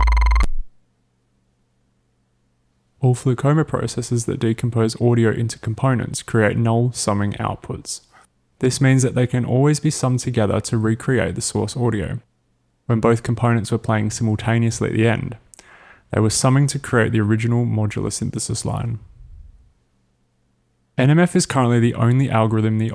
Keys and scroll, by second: 0.6 space.